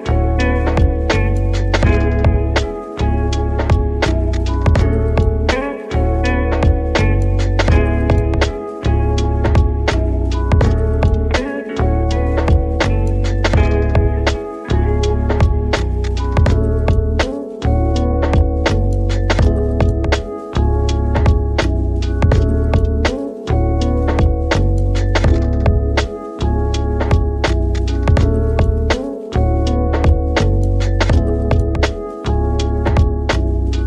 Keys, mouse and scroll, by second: 0.9-5.5 drag, 6.9-8.2 scroll down 8, 8.2 click, 8.7-9.0 middle drag, 9.0 scroll up 2, 10.4-13.5 drag, 13.9 scroll down 1, 14.1-14.6 middle drag, 14.6 shift+d, 17.2-17.5 middle drag, 17.5 g, 18.8 r, 20.3 r, 22.4 shift+d, 23.5 r, 26.6-28.6 middle drag, 28.6-30.3 scroll up 3, 30.3-33.4 middle drag, 33.5 middle click.